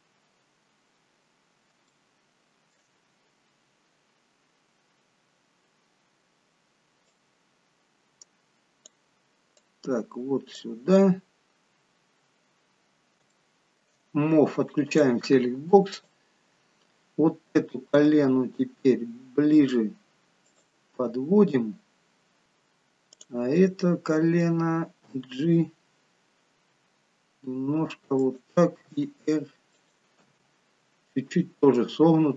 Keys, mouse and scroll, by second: 1.2-1.8 scroll up 2, 1.8 scroll up 2, 2.0 shift+middle click, 5.2-7.1 scroll down 2, 7.1 click, 7.1-8.0 scroll down 1, 9.6 click, 11.3 middle click, 11.3 scroll up 7, 11.5-12.9 scroll down 5, 12.9 scroll down 1, 13.4 shift+middle click, 14.9 click, 15.9 click, 18.1 g, 23.2 click, 23.7 middle click, 25.0 g, 28.9 r, 30.4 g, 31.8 middle click.